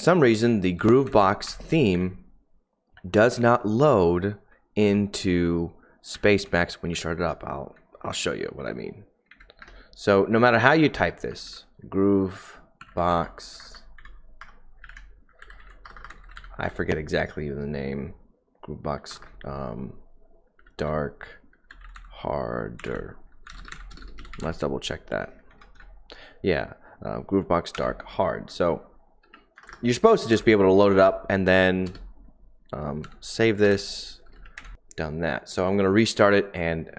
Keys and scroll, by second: 0.7-1.8 typing, 1.9 Up, 4.1 Down, 4.1-8.5 typing, 5.1 Up, 6.4 Down, 7.6 Up, 9.2 Right, 9.6 Return, 10.3-11.4 typing, 12.7-25.9 typing, 27.7 Escape, 27.7 typing, 29.2-35.2 typing.